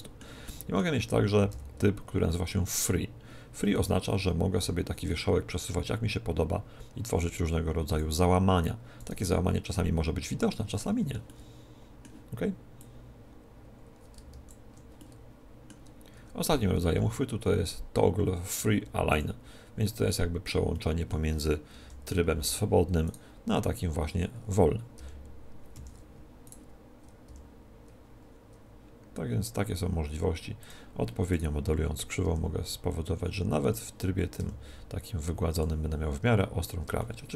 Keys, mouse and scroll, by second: 1.4 v, 3.6-5.3 right drag, 4.5 g, 7.9-9.7 drag, 8.9-10.8 right drag, 9.0 g, 11.1-12.8 middle drag, 12.7-14.7 drag, 14.9-16.6 middle drag, 16.4 v, 19.9-22.4 middle drag, 21.6 KP_1, 22.9-24.9 right drag, 24.9 g, 26.3-28.1 right drag, 27.1 g, 28.4 g, 30.5 click, 31.2-32.3 middle drag, 32.1 g, 32.3 right click, 33.7-37.1 drag, 34.3 g, 36.9-37.3 middle drag.